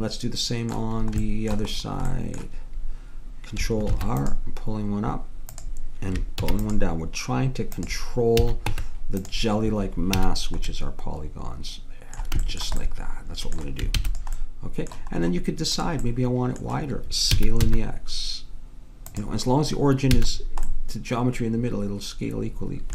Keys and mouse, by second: 3.9 ctrl+r, 6.5 ctrl+r, 8.4 a, 8.7 Tab, 10.2 a, 14.0 ctrl+s, 15.9-17.7 middle drag, 17.3 s, 20.1 a.